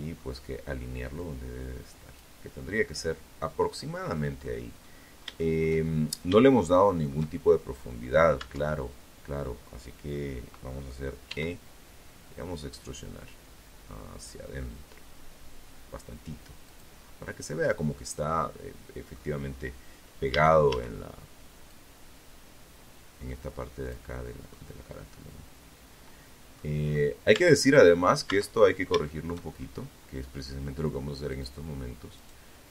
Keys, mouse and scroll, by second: 1.0-2.1 middle drag, 2.2 middle click, 2.5-2.9 scroll down 1, 2.9-3.9 middle drag, 4.0-4.8 shift+scroll up 2, 4.6 shift+middle click, 5.5 shift+scroll up 1, 6.5 Tab, 9.4 e, 14.8 click, 15.1 scroll down 2, 15.4-17.5 middle drag, 17.5-17.9 scroll up 2, 18.5 a, 19.9-22.3 drag, 22.7-24.9 middle drag, 25.0 scroll up 2, 25.5 Tab, 25.8 right click, 26.4 Tab, 26.8-27.2 scroll down 1, 27.2 shift+middle click, 27.7 shift+scroll up 2, 29.5 click, 30.3 right click, 31.5-32.7 drag.